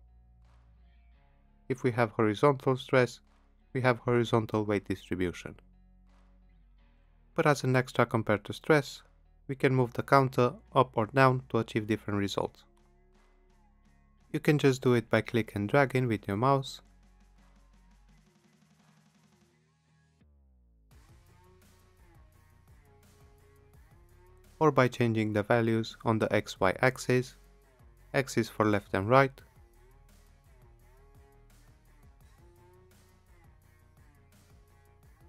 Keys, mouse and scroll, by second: 0.3 click, 3.7 click, 6.5 click, 13.8 click, 26.9 click, 29.0 typing, 30.3-31.1 typing, 31.2 Return, 32.7 click, 34.0-35.2 typing.